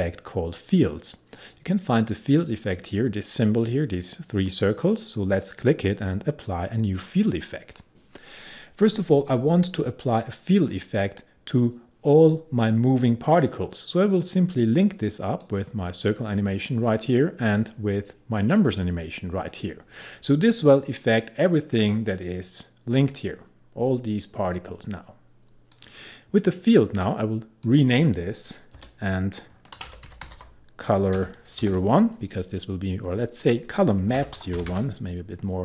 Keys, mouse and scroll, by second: 5.5-13.2 drag, 14.3-25.8 drag, 26.8-27.7 scroll down 1, 27.7 click, 28.8 Return, 29.6-31.7 typing, 33.4 click, 34.0-35.1 typing.